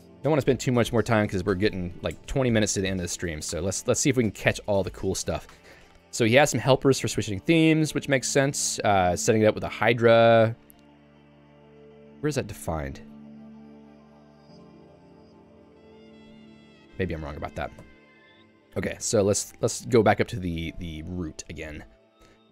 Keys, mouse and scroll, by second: 3.6 Escape, 4.5 j, 9.2 k, 9.7 j, 10.2 ctrl+u, 12.9-16.3 typing, 16.0 Return, 16.8 Escape, 17.9 ctrl+u, 19.1 shift+Tab, 19.5 shift+Tab, 19.8 j, 22.2 k.